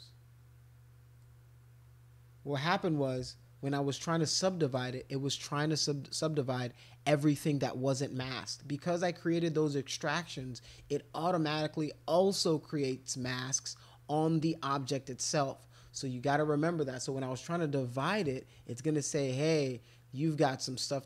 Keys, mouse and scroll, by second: 1.2-4.8 drag, 10.8 alt+click, 17.9 click.